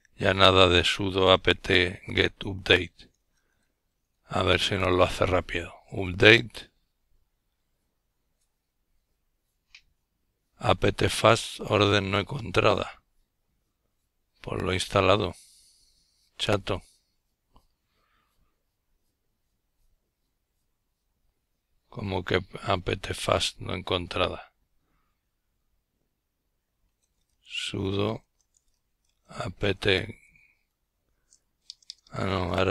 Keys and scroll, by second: 16.0-20.0 typing, 21.1-21.9 typing, 23.5-29.7 typing, 29.7 Return.